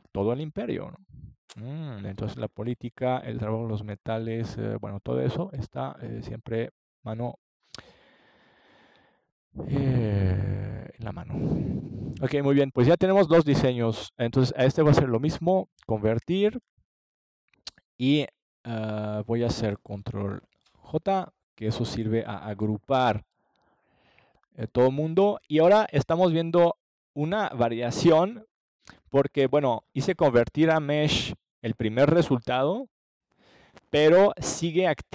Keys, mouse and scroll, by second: 1.0 middle click, 4.5 ctrl+j, 6.7-8.5 middle drag, 9.8-13.5 middle drag, 19.9-21.9 drag, 21.9-23.7 middle drag, 31.5-33.5 middle drag.